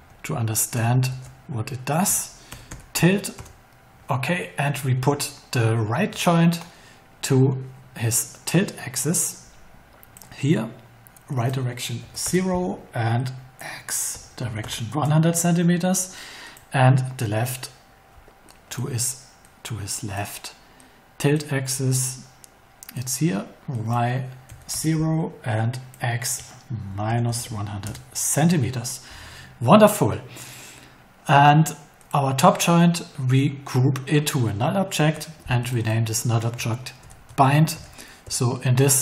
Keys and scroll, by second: 1.1-3.4 typing, 12.0 0, 12.2 Return, 14.1 1, 14.9 Return, 24.4 0, 24.7 Return, 26.6-27.5 typing, 27.8 Return, 34.9 alt+g, 36.7-38.2 typing.